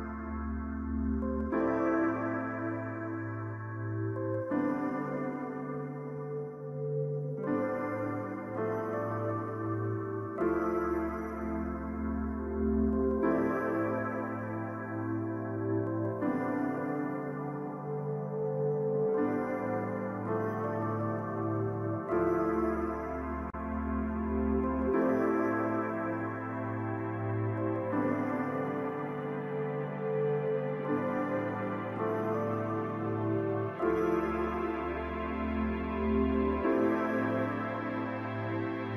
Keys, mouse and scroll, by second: 4.0 ctrl+shift+click, 19.4 ctrl+z, 19.6 ctrl+z, 26.8 ctrl+scroll up 1, 27.5 ctrl+scroll down 1, 28.4-29.3 shift+scroll down 1, 29.3-30.5 shift+scroll down 1.